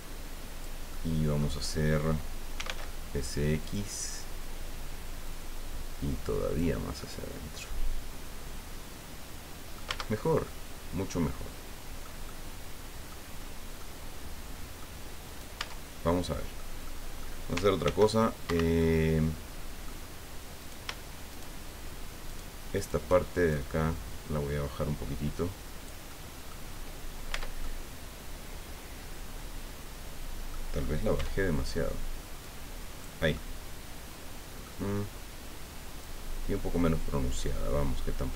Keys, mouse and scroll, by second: 0.9 middle click, 2.6 s, 2.7 x, 3.6 click, 5.2-6.7 drag, 7.0-9.9 middle drag, 9.9 Tab, 10.1-10.4 scroll down 1, 10.4-12.2 drag, 12.3 click, 13.8-14.9 drag, 15.2 right click, 15.6 Tab, 16.1 click, 16.8 click, 17.8 ctrl+r, 18.4 ctrl+Escape, 18.8-20.0 middle drag, 20.6 shift+right click, 21.3 shift+right click, 22.2 shift+right click, 22.7 shift+right click, 23.5-26.0 shift+drag, 26.7 scroll down 2, 27.3 Tab, 27.6-30.6 drag, 31.1 Tab, 32.4 click, 33.3-34.8 drag, 36.0-38.3 drag.